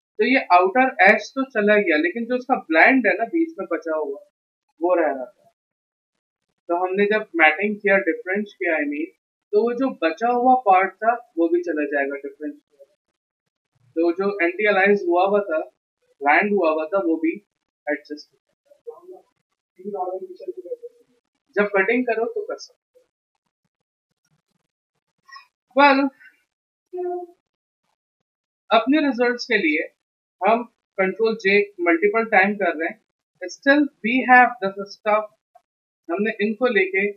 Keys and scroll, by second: 31.2 ctrl+j, 31.8 ctrl+j.